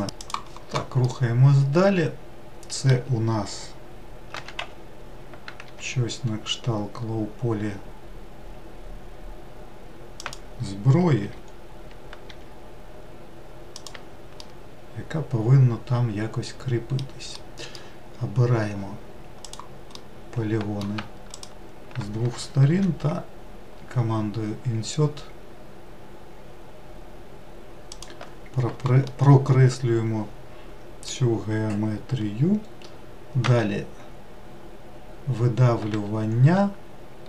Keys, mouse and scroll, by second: 1.1-4.3 middle drag, 4.4 s, 11.3 g, 14.4-19.5 middle drag, 19.5 click, 20.0-21.4 middle drag, 21.4 shift+click, 29.1-32.3 middle drag, 33.5 e.